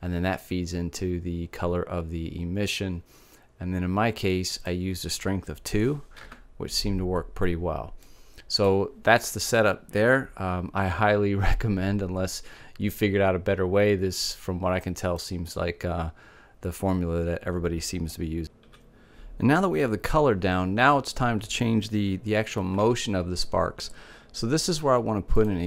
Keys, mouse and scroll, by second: 4.0-5.8 drag, 7.5 middle click, 13.7-15.5 middle drag, 22.5 shift+a.